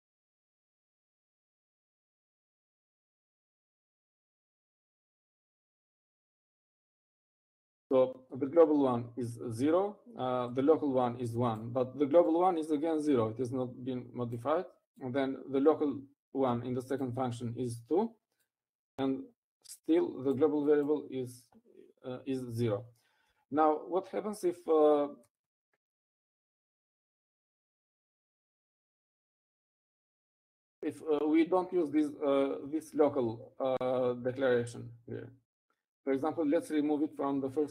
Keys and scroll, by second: 2.7 shift+Escape, 2.7-3.4 typing, 4.5-7.0 typing, 25.0 Up, 26.7 Up, 29.4 Up, 29.7 Up, 32.0 Up, 32.5 Up, 32.7 Up, 32.9 Up, 33.0 Up, 33.4 Up, 33.5 Up, 34.0 Up, 34.4 Up, 34.5 Up, 34.7 Up, 35.7 Up, 35.9 Up.